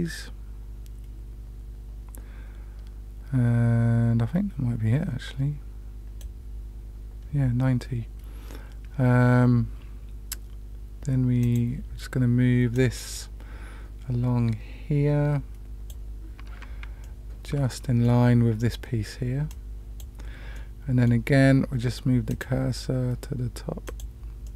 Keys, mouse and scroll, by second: 11.4 click, 12.7-15.9 drag, 17.0 shift+middle click, 17.7 middle click, 19.4 click, 20.5 middle click, 22.2 click, 23.9 click, 24.4-24.5 middle drag.